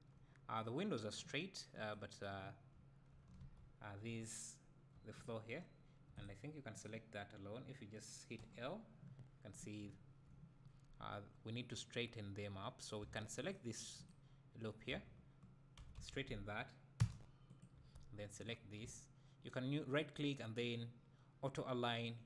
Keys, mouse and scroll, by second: 2.8 `, 3.4 alt+a, 5.0 3, 6.8 click, 8.4 l, 13.8 alt+click, 15.8 s, 18.5 alt+click.